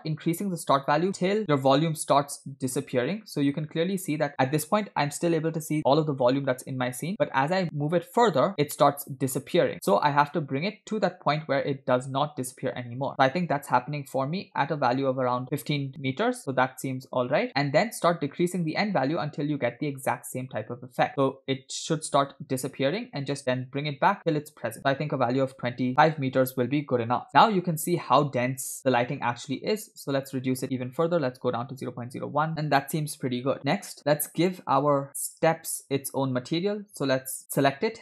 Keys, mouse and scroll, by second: 0.0-17.5 drag, 17.8-26.7 drag, 29.6-30.2 scroll up 1, 30.2 scroll up 1, 30.2-31.9 drag, 34.4 click.